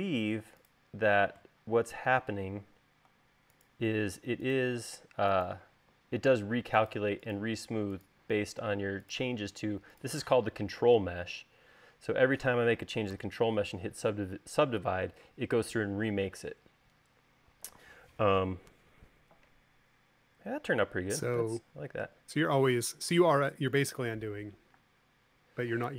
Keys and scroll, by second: 3.0 super+z, 5.6 space, 13.9 u, 25.5 space.